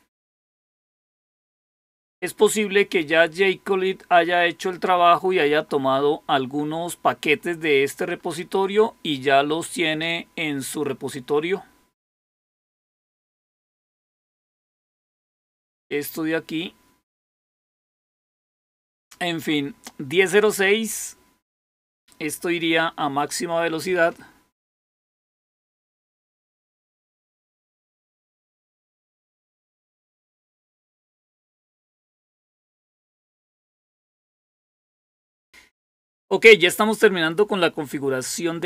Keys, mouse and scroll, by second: 14.2 click, 17.0 click.